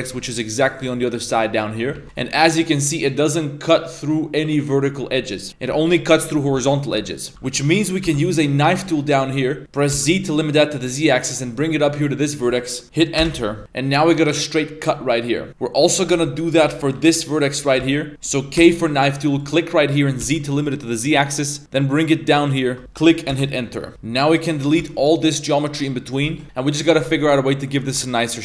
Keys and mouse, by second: 0.0 shift+middle click, 0.8 z, 2.0 shift+middle click, 2.0 z, 6.6 z, 6.8 shift+middle click, 7.3 k, 16.9 a, 16.9 k, 23.9 a, 23.9 3, 24.3 ctrl+right click, 24.8 x, 26.3 1, 27.9 Tab.